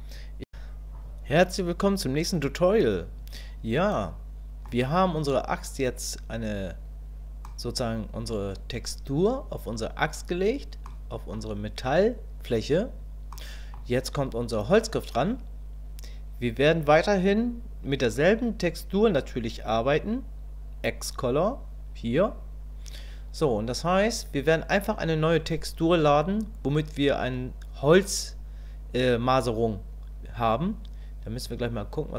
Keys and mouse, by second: 3.9 middle click, 7.4 middle click, 10.9 middle click, 13.3 middle click, 23.4 middle click.